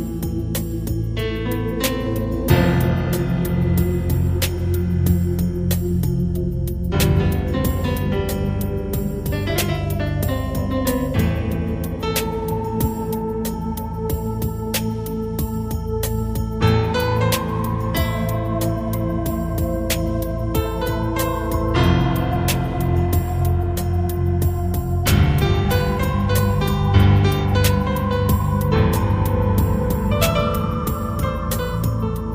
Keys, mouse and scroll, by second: 8.9 right click, 10.1 click, 13.5 p, 21.9 right click, 23.5 g, 26.1 click, 26.5 g, 27.5 click.